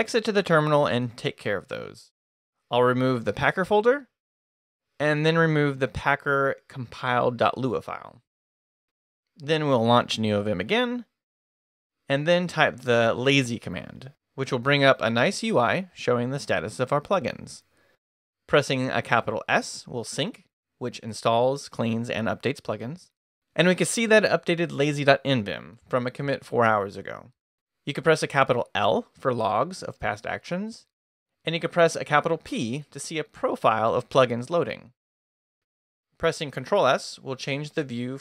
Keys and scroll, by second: 0.0-0.6 typing, 10.4 Return, 11.5-13.0 typing, 13.1 Return, 18.9 shift+s, 29.4 shift+l, 33.6 shift+p, 34.9 ctrl+d, 35.6 ctrl+d, 37.1 ctrl+s.